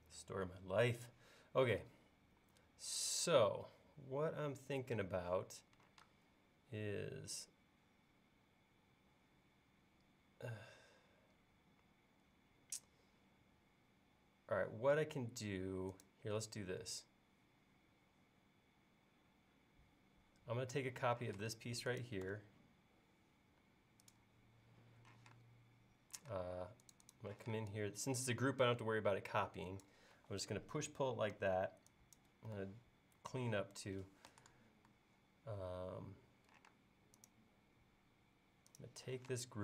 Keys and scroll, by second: 6.1 space, 21.3 m, 25.2 p, 26.3 space, 27.5 p, 30.2 e, 36.7 space, 39.2 m.